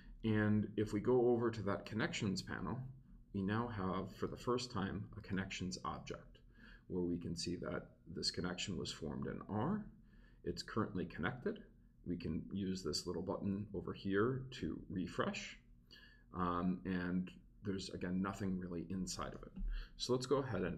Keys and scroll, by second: 0.2 super+s, 20.0 Return.